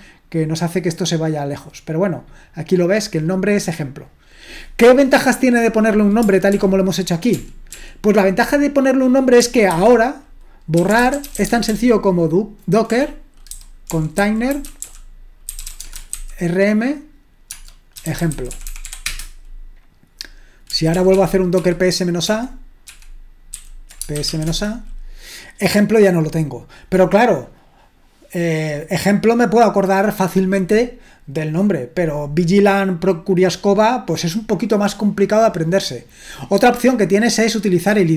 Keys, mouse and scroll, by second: 3.1-4.9 drag, 6.5 ctrl+p, 7.4 p, 9.7 ctrl+c, 10.5-16.6 typing, 17.7-19.3 typing, 20.9 ctrl+p, 21.1 ctrl+p, 21.6 ctrl+p, 22.2 ctrl+p, 22.9 ctrl+p, 23.6 ctrl+n, 23.9-24.8 typing, 29.6-30.6 drag, 37.4-38.1 drag.